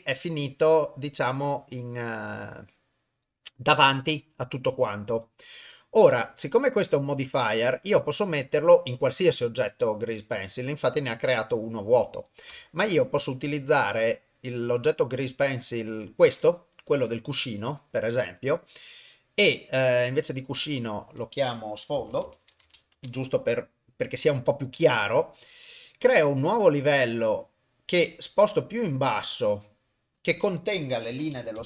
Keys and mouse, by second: 11.1 click, 11.4 click, 12.5 Delete, 13.3 middle click, 14.4 click, 20.5 click, 25.4 click, 26.8 click, 28.5 click, 28.7 click, 28.9 click, 29.1 click, 30.1-31.6 drag.